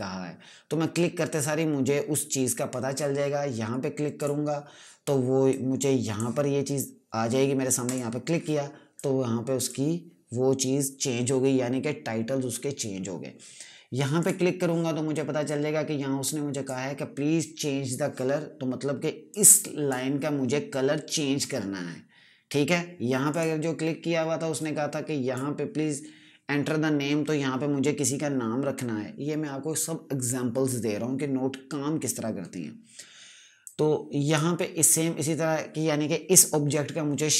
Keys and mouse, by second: 4.1 click, 14.1 click, 19.2 click, 23.2 click, 33.5 click.